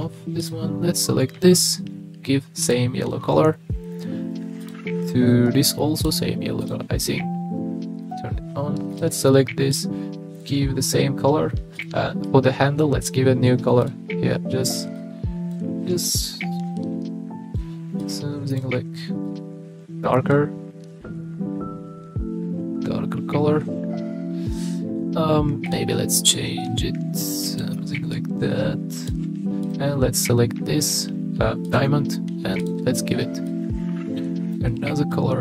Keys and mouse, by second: 0.4 click, 1.7-2.8 drag, 6.1 click, 8.0 click, 9.8 click, 13.0 click, 13.8 click, 25.7 click, 29.6 click, 31.7 click, 32.6 click.